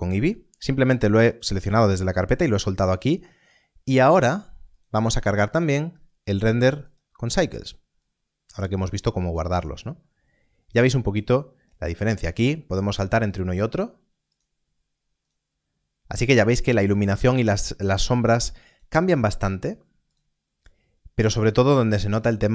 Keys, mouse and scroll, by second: 4.6 click, 5.8-6.2 scroll down 1, 6.6 click, 11.8 click, 18.6 click.